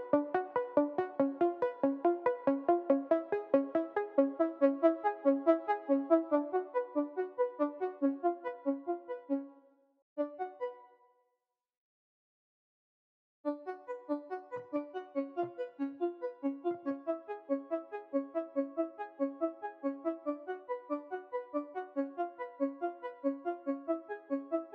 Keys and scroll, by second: 9.3 space, 9.9 space, 10.6 space, 13.2 space, 18.6 v.